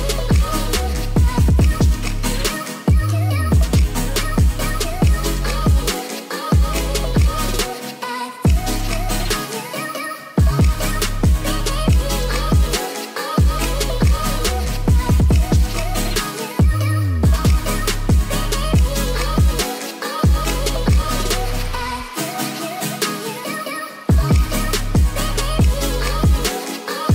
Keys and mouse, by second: 4.8 shift+drag, 10.5 ctrl+2, 10.7-11.0 drag, 11.6-11.9 drag, 12.8-14.6 middle drag, 15.0-16.0 middle drag, 21.0 middle click, 21.0 click, 21.1-21.8 middle drag.